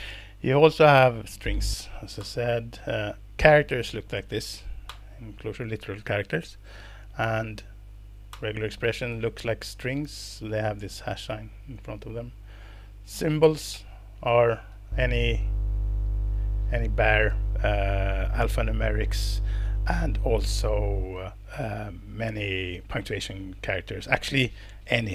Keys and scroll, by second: 2.2 alt+Return, 2.5 Down, 4.9 alt+Return, 7.4 Down, 8.3 alt+Return.